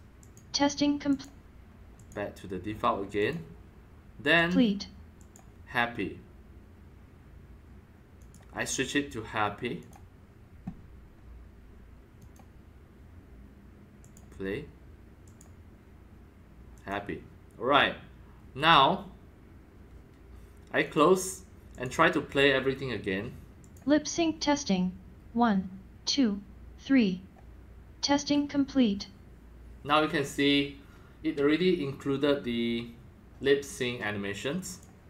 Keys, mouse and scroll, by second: 0.2 click, 1.1 click, 2.0 click, 3.2 click, 4.3 click, 5.1 click, 8.2 click, 9.8 click, 12.2 click, 12.8-13.5 drag, 14.0 click, 15.2 click, 16.7 click, 18.7 click, 20.8 click, 21.7 click, 23.6 click, 27.3 drag, 27.7 click, 34.6-35.0 drag.